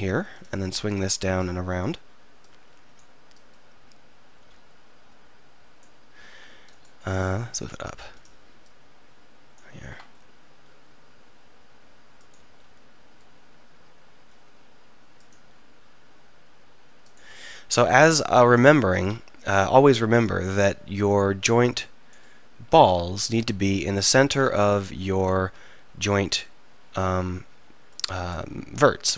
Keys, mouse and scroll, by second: 6.8 right click, 6.9 click, 10.6 e, 12.4-14.2 drag, 12.6 e, 14.2-15.4 middle drag, 15.4 click, 15.5 e, 19.0 z, 23.1 z, 25.2-28.0 drag, 25.4 z.